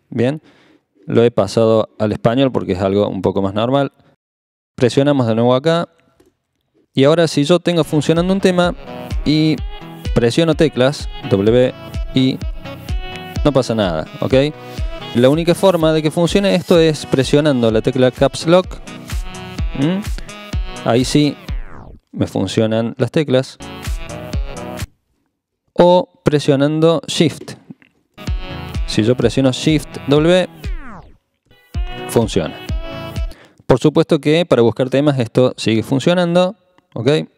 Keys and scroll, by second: 11.4-12.9 typing, 18.9 Caps_Lock, 21.3 w, 23.6 w, 24.8 i, 30.5 shift+w, 33.2 typing, 35.4-36.3 typing.